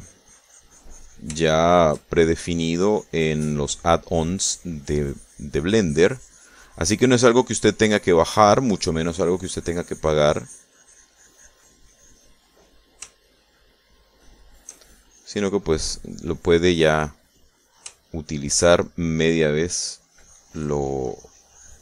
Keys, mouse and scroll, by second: 2.5 shift+middle click, 3.6 click, 4.6 click, 6.6-13.5 drag, 13.7 middle click, 14.3 shift+middle click, 15.4 shift+middle click, 16.1-19.0 shift+drag, 19.1 shift+middle click, 19.8 shift+click, 20.3-21.8 shift+drag.